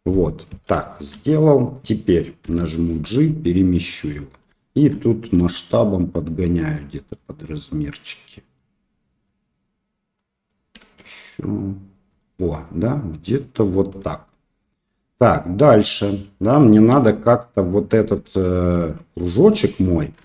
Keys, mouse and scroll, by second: 0.8 shift+middle click, 2.4 g, 4.7 shift+middle click, 5.4 s, 8.0 click, 9.2 click, 10.8 s, 14.8-15.9 drag, 16.8-18.8 drag.